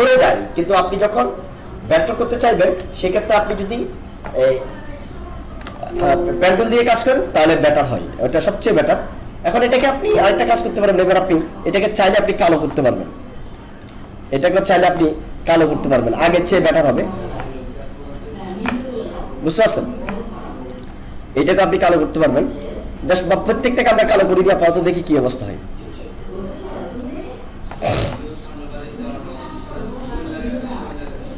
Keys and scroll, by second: 5.7 alt+space.